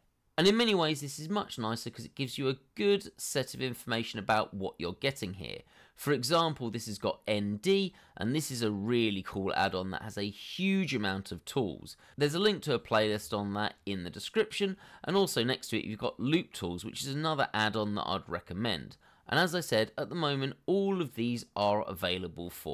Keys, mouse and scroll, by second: 0.3 scroll up 1, 0.9 scroll up 1, 2.0 scroll up 1, 2.5 scroll down 1, 3.4 scroll down 1, 22.4 scroll up 1.